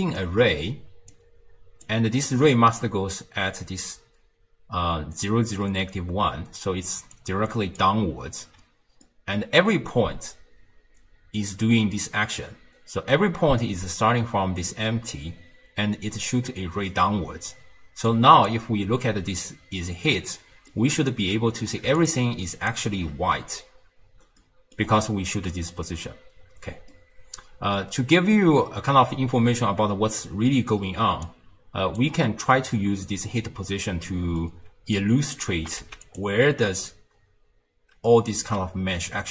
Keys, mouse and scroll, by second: 0.2 d, 0.9 d, 1.1-1.9 drag, 1.9 d, 4.4 d, 6.5 d, 7.0 d, 7.1 d, 7.2-7.8 drag, 7.8-8.3 d, 9.1-12.1 middle drag, 18.1 click, 20.7-22.0 middle drag, 22.0 ctrl+shift+click, 22.6 ctrl+shift+click, 23.7-24.4 scroll down 1, 24.4-24.9 middle drag, 24.9-25.7 scroll up 1, 26.9-29.9 middle drag, 31.3 click, 32.3-33.7 middle drag, 33.7-34.1 scroll down 1, 34.1-35.0 middle drag, 35.0 click, 35.6 g.